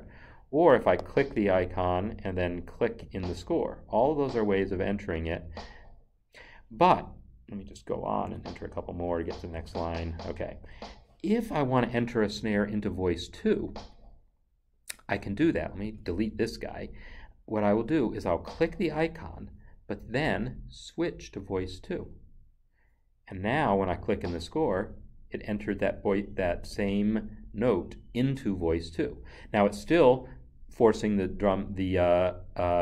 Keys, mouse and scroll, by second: 0.9 double click, 3.0 click, 8.2 a, 13.5 Left, 18.3 click, 21.9 click, 24.0 click.